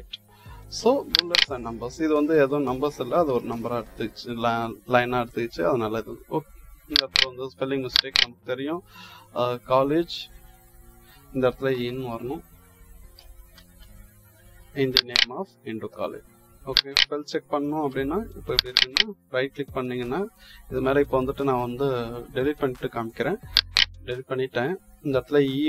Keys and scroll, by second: 3.1 BackSpace, 11.6 Delete, 13.0 Delete, 13.2-14.1 typing, 17.8 BackSpace.